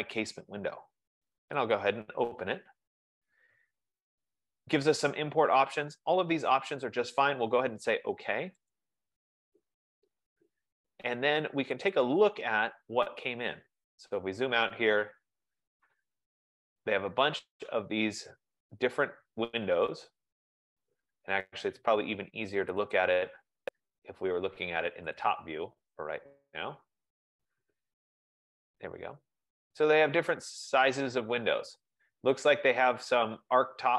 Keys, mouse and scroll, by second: 2.0 click, 8.9 click, 12.8 click, 13.2-15.7 scroll, 15.7-16.1 scroll, 17.6 right click, 18.0-18.8 scroll, 18.8-19.6 scroll, 19.6-20.7 scroll, 21.9 right click, 22.8 click, 23.6 click, 25.3 click, 26.2 click, 27.4-27.7 scroll, 28.2-29.8 scroll, 28.7 F15, 29.8 scroll, 30.6-30.9 scroll, 31.3-31.9 scroll, 32.3 scroll, 33.4-33.9 scroll.